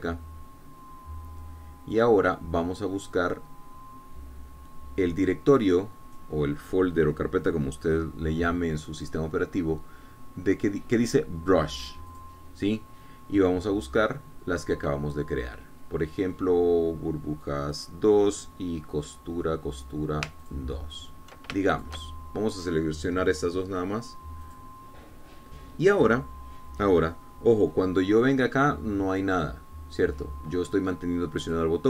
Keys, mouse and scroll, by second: 13.5 click, 19.1 click, 21.8 ctrl+click, 23.1 ctrl+shift+click, 25.8 click, 30.6 click.